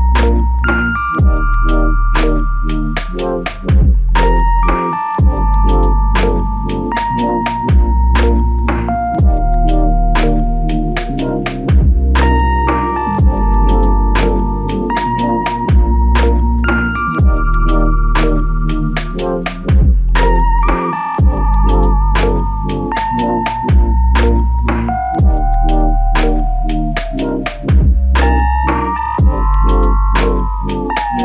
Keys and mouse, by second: 1.1 shift+click, 4.4 alt+shift+click, 7.9-9.2 typing, 9.8 double click, 14.6 shift+click, 15.8 shift+click, 17.1 double click, 20.3 shift+click, 21.4 double click, 26.3 double click.